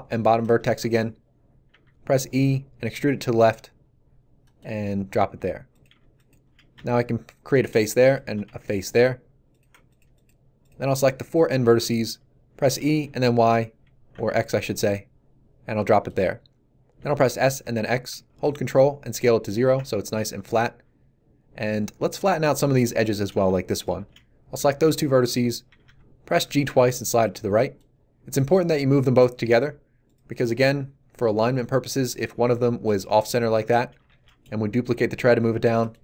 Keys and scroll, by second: 1.7 e, 6.7 f, 12.6 e, 13.0 y, 14.1 x, 16.9 s, 17.4 x, 25.6 g, 32.0 g, 33.4 a, 34.0 shift+d.